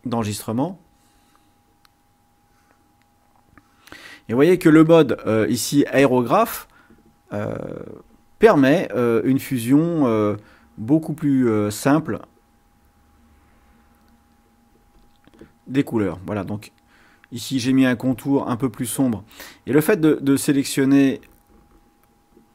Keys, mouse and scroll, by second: 1.2 click, 2.4 click, 3.4 click, 7.0 click, 7.9 click, 9.0 click, 12.2 click, 12.9 click, 13.8-15.3 drag, 15.7 click, 16.2-17.5 drag, 18.9-21.3 drag, 21.5-22.5 drag.